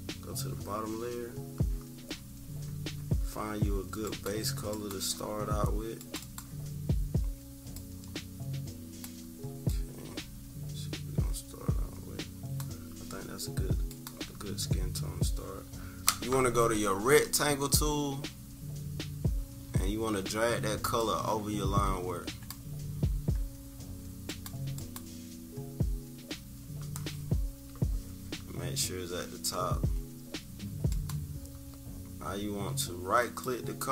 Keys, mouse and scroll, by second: 4.0 click, 6.0 click, 7.7-9.0 drag, 9.6-12.5 drag, 13.9 click, 21.0-22.5 drag, 24.2-28.6 drag, 30.9 click, 33.2 right click.